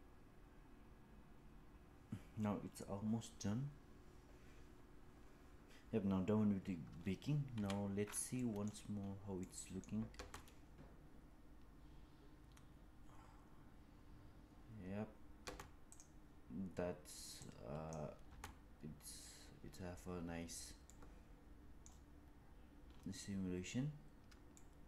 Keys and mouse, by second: 7.4 KP_1, 8.2 middle drag, 9.3 middle click, 10.0 space, 15.3 space, 15.8 click, 17.3-17.8 drag, 18.1 space, 20.8 middle click, 24.5 shift+middle click.